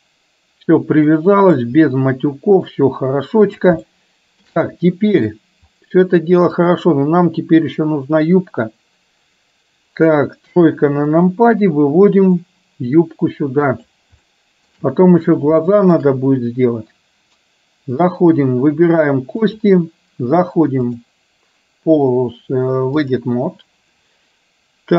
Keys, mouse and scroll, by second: 1.2-1.7 middle drag, 2.8-3.7 middle drag, 3.9-4.7 shift+middle drag, 6.7 click, 10.7 KP_3, 12.5-14.0 drag, 14.3 shift+middle click, 15.7-16.0 shift+middle drag, 19.5 click, 21.0-23.3 drag.